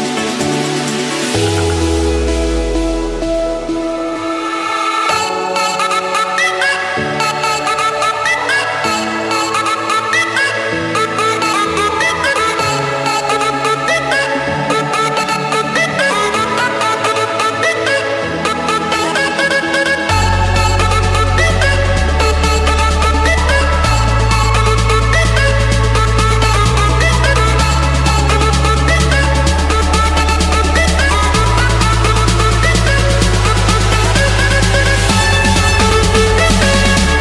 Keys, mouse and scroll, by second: 0.4 click, 1.3-2.3 typing, 2.8 Return, 4.1-5.0 typing, 5.2 Return, 6.7-7.9 typing, 8.2 Return, 10.4 click, 12.8 click, 14.2-15.7 typing, 14.6 Return, 17.9 Return, 18.6 Return, 20.5 click, 21.8-22.7 typing, 23.2 Return, 24.7-25.6 typing, 25.8 Return, 28.7-31.3 typing, 31.7 Return, 32.6-33.6 drag, 33.8 click, 33.9 Return, 36.6-37.2 typing.